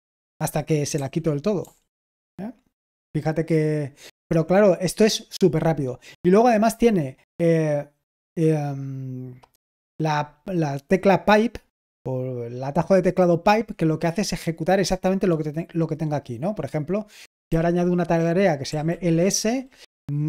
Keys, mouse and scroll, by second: 0.8-1.8 typing, 17.5-19.4 typing.